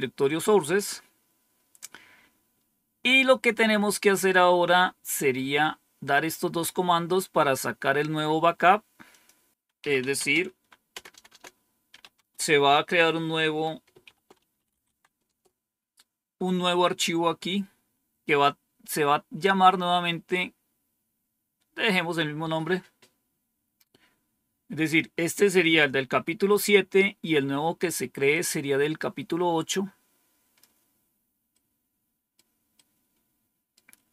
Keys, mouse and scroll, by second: 2.2-3.0 scroll down 1, 9.0 click, 9.5-12.4 typing, 14.0-15.1 typing, 15.2 Return, 25.3-26.5 drag, 28.2-30.5 drag, 31.5 right click, 32.7-33.7 right drag.